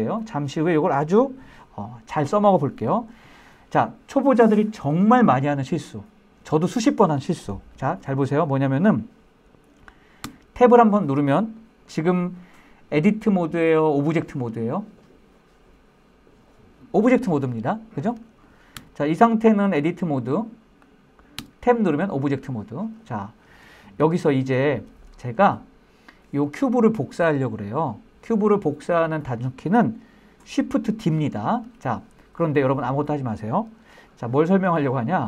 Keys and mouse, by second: 9.4 Tab, 10.8-11.1 middle drag, 11.2-11.6 middle drag, 18.0 Tab, 19.0 click, 19.4 click, 20.1 click, 20.6 Tab, 21.2-22.2 middle drag, 23.0-23.4 shift+middle drag, 23.5 middle click, 24.2 shift+middle click, 33.3-34.6 shift+middle drag.